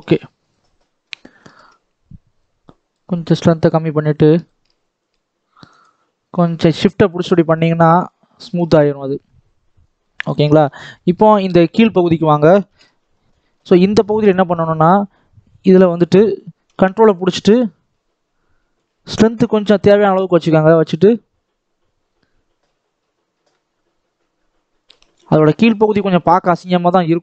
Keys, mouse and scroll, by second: 0.5 scroll up 4, 0.7-2.4 middle drag, 2.4-7.5 drag, 7.5 scroll down 2, 7.8-9.5 middle drag, 9.5-9.9 scroll down 4, 9.9-11.0 middle drag, 11.0 scroll up 4, 11.2 middle click, 11.9 shift+middle click, 12.6 ctrl+KP_7, 13.4 scroll up 3, 13.6-15.8 shift+middle drag, 15.8-23.8 drag, 25.3 scroll down 4, 25.6-26.8 scroll up 2.